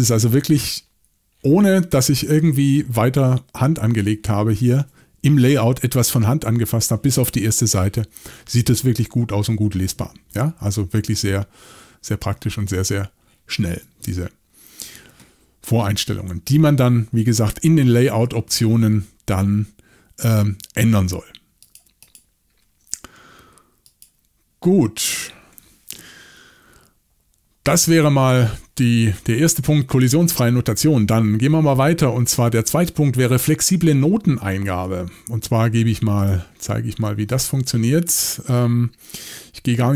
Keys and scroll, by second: 17.6 shift+super+l.